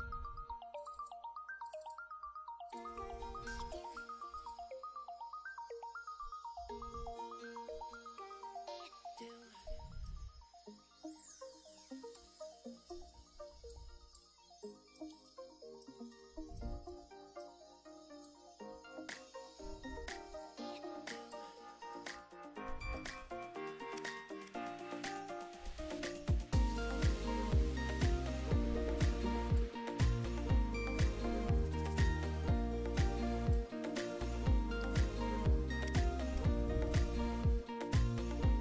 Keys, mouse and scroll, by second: 0.9-1.3 drag, 1.7 click, 2.8 click, 4.5 click, 8.0-9.5 middle drag, 9.7 ctrl+middle click, 11.4-12.5 drag, 13.2 shift+middle click, 13.8-14.4 drag, 14.7-15.2 shift+middle drag, 15.3 shift+middle click, 16.2 ctrl+middle click, 17.0 ctrl+shift+middle click, 18.3-21.6 drag, 22.1-23.3 middle drag, 27.6-29.9 drag, 32.3-33.8 drag, 34.2-35.1 shift+drag, 35.1-36.7 shift+middle drag.